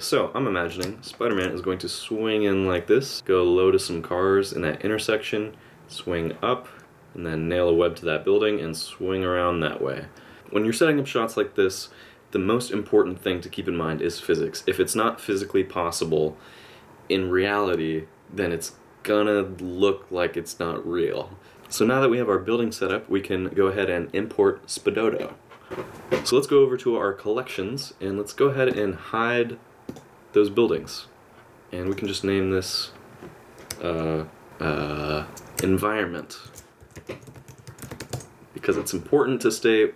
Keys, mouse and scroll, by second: 1.0 shift+scroll down 1, 1.0 shift+middle click, 21.5 middle click, 25.6 click, 28.7 click, 29.9 click.